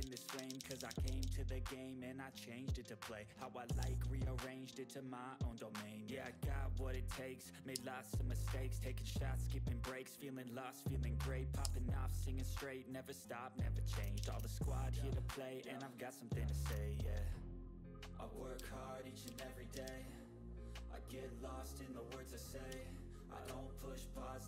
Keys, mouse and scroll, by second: 1.5 click, 3.7 ctrl+z, 4.2 click, 8.0 click, 8.8 typing, 10.3 click, 10.3 typing, 10.3 click, 12.3 click, 12.3 click, 12.3 typing, 14.1 ctrl+z, 14.7 shift+click, 16.7 shift+click, 18.5 Up, 18.5 typing, 20.5 typing, 20.7 click, 22.6 ctrl+scroll up 1, 23.0 ctrl+scroll down 1, 23.3 click.